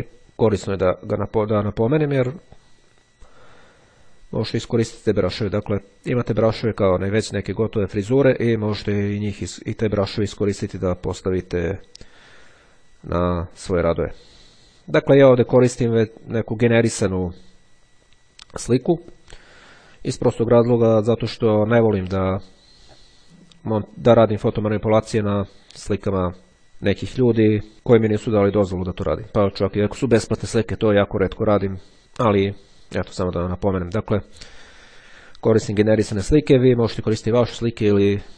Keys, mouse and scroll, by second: 0.7-3.1 drag, 12.3 click, 15.2 click.